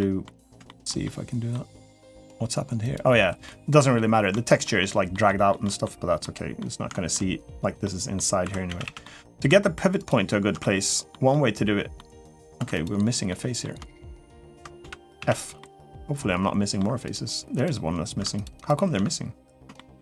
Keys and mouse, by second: 0.4 shift+middle click, 0.8 middle click, 2.7 click, 3.2 middle click, 4.1 shift+middle click, 4.6 middle click, 5.1 shift+middle click, 5.4 shift+middle click, 6.0 middle click, 6.7 shift+middle click, 7.6 middle click, 8.2 2, 8.5 a, 8.6 a, 8.8 middle click, 9.8 alt+shift+click, 10.4 middle click, 11.1 middle click, 12.3 2, 12.5 click, 13.1 middle click, 13.9 alt+shift+click, 14.6 f, 15.0 a, 15.4-16.6 middle drag, 16.8 click, 18.1 alt+shift+click, 18.3 alt+shift+click, 19.5 shift+middle click, 19.8 3.